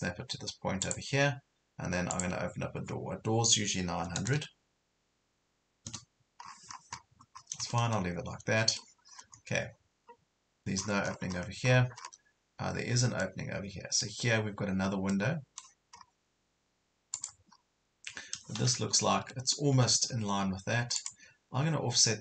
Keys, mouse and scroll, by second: 0.8 click, 4.0 KP_9, 6.5-6.8 scroll down 1, 7.7 middle click, 9.1 scroll up 1, 10.8 scroll down 1, 11.7 scroll up 1, 13.2 middle click, 15.8 scroll up 1, 17.2 click, 17.5 scroll up 1, 19.2 Right, 19.7 Left, 21.0 click.